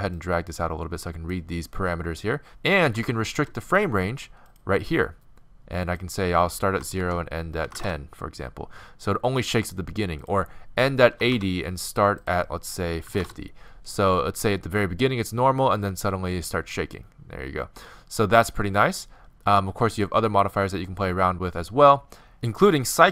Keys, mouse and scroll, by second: 0.2-2.0 drag, 2.4-4.0 drag, 4.5-23.1 drag.